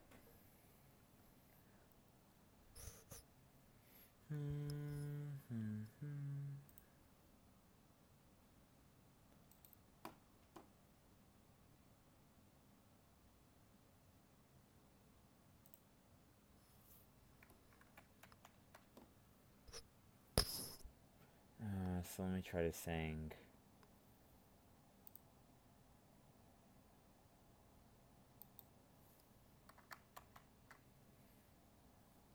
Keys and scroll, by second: 18.2 ctrl+z, 30.1 ctrl+z.